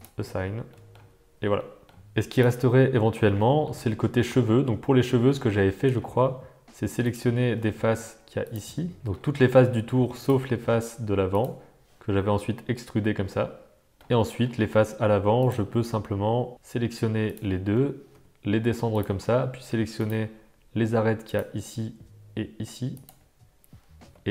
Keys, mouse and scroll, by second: 0.0 click, 0.7 middle click, 0.9 Tab, 1.5-1.9 shift+middle drag, 2.5 middle click, 2.8 Tab, 3.4 shift+middle click, 3.8 middle click, 5.1 shift+middle click, 5.6 middle click, 7.0 click, 8.4 click, 9.0 middle click, 10.1 shift+click, 12.4 e, 13.9 shift+click, 14.3 middle click, 15.3 click, 17.2 shift+click, 18.1 e, 21.3 click, 22.9 shift+click, 23.9 g.